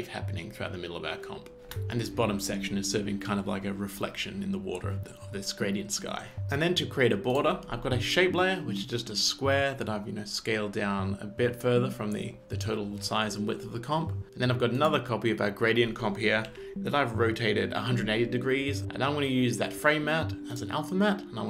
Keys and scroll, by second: 1.7 space, 16.5 r.